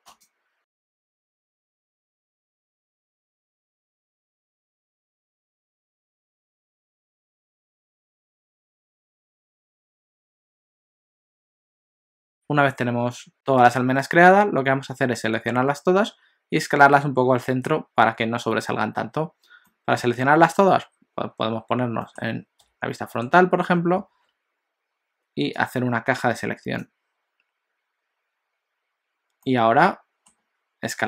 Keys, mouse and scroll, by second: 12.3 shift+middle click, 19.7 middle click, 22.7 KP_1, 24.1 alt+a, 25.6 click, 29.5 middle click.